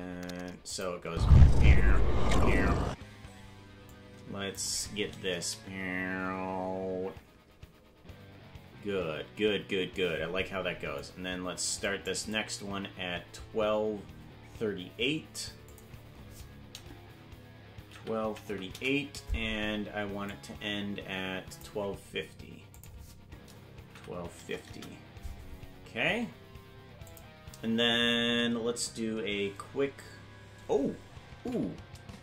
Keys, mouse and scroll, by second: 0.8 click, 1.0 space, 2.9 space, 3.9 click, 5.5-9.2 Right, 9.4 Right, 11.0-12.1 drag, 15.7-19.4 drag, 20.4-21.7 drag, 22.7-25.5 drag, 27.1 click, 32.0 ctrl+z.